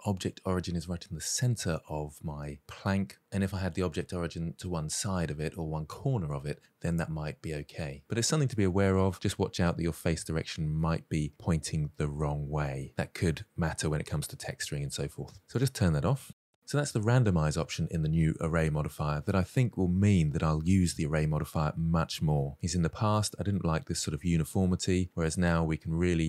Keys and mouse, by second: 10.6-12.3 middle drag, 15.5-16.6 drag, 23.2-23.5 middle drag.